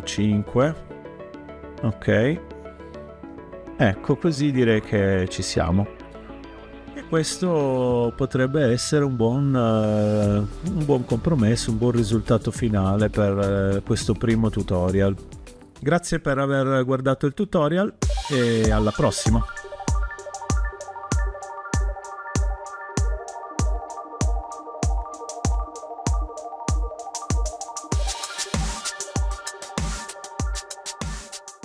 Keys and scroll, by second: 0.0 5, 0.4 Return.